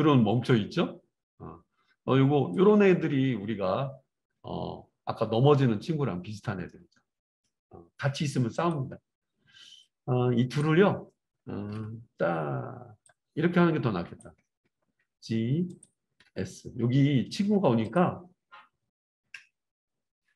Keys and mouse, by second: 8.7-9.8 middle drag, 9.8-12.9 drag, 11.7 KP_7, 14.9 g, 15.9-20.3 middle drag, 16.2 r, 19.3 KP_0.